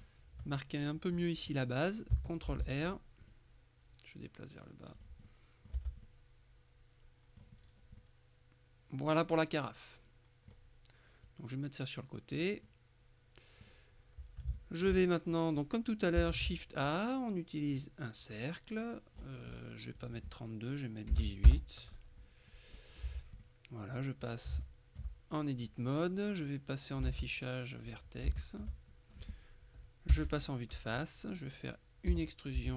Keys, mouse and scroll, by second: 0.1 middle click, 2.6 ctrl+r, 3.3 click, 5.0 click, 5.8 Tab, 6.1 middle click, 8.1 middle click, 11.3-13.0 drag, 14.6 shift+click, 16.4 shift+a, 17.8 click, 20.0 click, 21.2 KP_1, 21.3 KP_8, 21.5 KP_Enter, 22.8-23.4 scroll up 2, 23.2 Tab, 23.5 middle click, 24.4 scroll up 3, 24.7 shift+middle click, 27.2 ctrl+Tab, 28.0 click, 28.4 shift+middle click, 30.2 KP_1, 32.6 z.